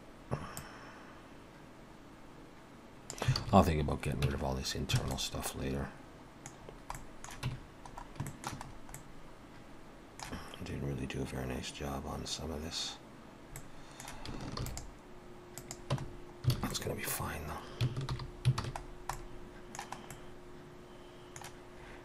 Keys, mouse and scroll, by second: 0.6 click, 3.4 alt+a, 4.3 Tab, 4.7-5.1 scroll down 2, 5.2 middle click, 6.6-7.0 scroll down 2, 7.0 middle click, 7.5 Tab, 7.9 scroll up 1, 8.3 shift+middle click, 8.6 scroll up 2, 9.0 middle click, 13.6 middle click, 14.6 ctrl+r, 16.0 Tab, 16.1-16.4 scroll down 2, 16.6 alt+a, 16.7 middle click, 17.2 scroll down 1, 18.1 alt+h, 18.5 alt+a, 18.8 scroll down 2, 19.2 middle click, 20.1 middle click.